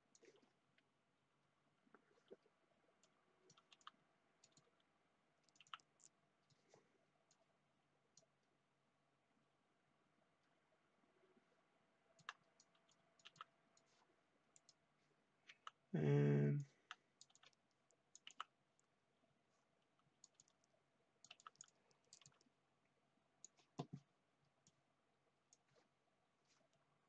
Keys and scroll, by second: 3.6-5.5 typing, 12.9-13.7 typing, 15.4-18.2 typing, 19.7-20.8 typing, 22.0-22.8 typing, 25.1 typing.